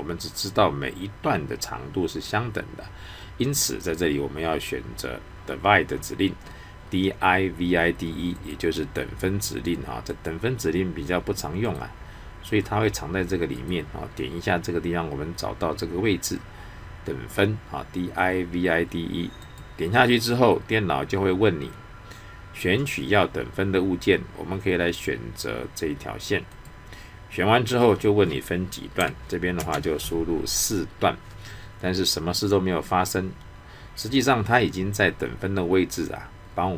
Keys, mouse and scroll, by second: 8.3 click, 19.4 click, 26.5 click.